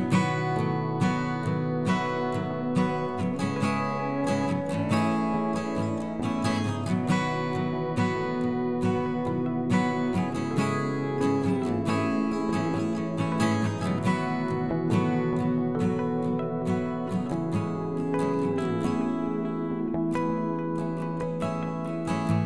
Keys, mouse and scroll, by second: 0.9 g, 2.4 s, 3.7 KP_7, 4.4 g, 6.1 s, 6.9 s, 8.5-9.1 scroll down 1, 9.1 shift+middle click, 9.8 shift+d, 12.3 shift+d, 14.6 s, 16.0 click, 16.2-17.8 middle drag, 21.2 KP_7.